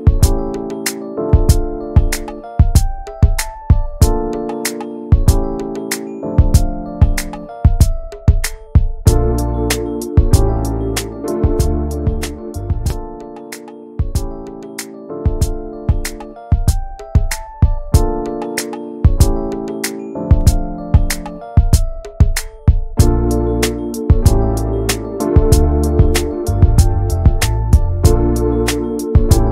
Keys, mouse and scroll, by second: 0.6 click, 1.1 click, 1.3 shift+middle click, 1.6 click, 1.8 `, 2.2 click, 2.4 middle click, 2.8-3.4 scroll up 2, 3.1 shift+middle click, 3.4-5.6 middle drag, 5.6 ctrl+s, 5.8 middle click, 6.1 ctrl+s, 7.9 click, 8.1-11.1 shift+middle drag, 11.1-11.8 scroll up 4, 11.4 shift+middle click, 11.8 middle click, 12.4-12.8 scroll down 3, 12.8-14.1 middle drag, 14.1 click, 14.4 middle click, 15.0 alt+z, 15.3 middle click, 15.5 alt+z, 15.8-17.1 middle drag, 17.1 click, 18.0 alt+z, 18.2-19.5 middle drag, 19.5 click, 19.6 scroll down 2, 19.9 middle click, 20.4 scroll up 1, 20.5 middle click, 21.3-23.4 drag, 23.5 middle click, 24.4-24.8 scroll up 1, 24.8 shift+middle click, 25.7 click, 26.1-29.5 shift+middle drag.